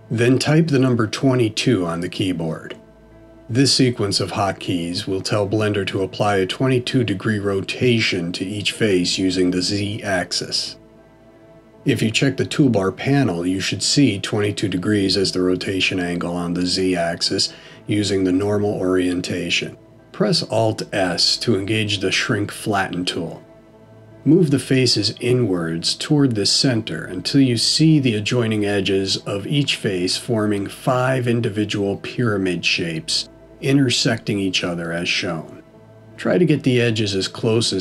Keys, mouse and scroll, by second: 8.1 middle click, 23.1 alt+s, 30.4-32.4 scroll up 6, 32.4-33.1 scroll up 1, 33.1 middle click, 36.2 click.